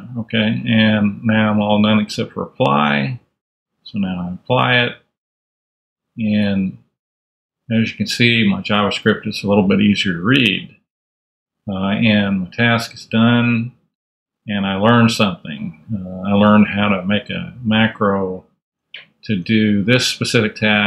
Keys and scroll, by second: 7.4 super+a, 7.5 super+Up, 8.6 super+Down, 9.3 super+a, 9.4 super+Up, 10.4 Up, 11.5 super+Tab, 12.9 super+Tab, 16.7 super+Left, 18.6 super+Tab.